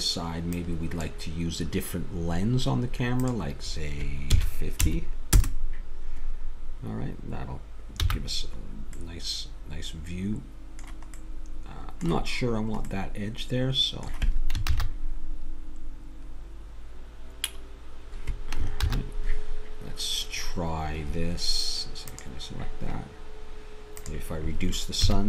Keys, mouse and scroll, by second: 0.5-5.6 drag, 8.0 n, 14.7 shift+z, 18.9 shift+z, 22.1-25.2 drag.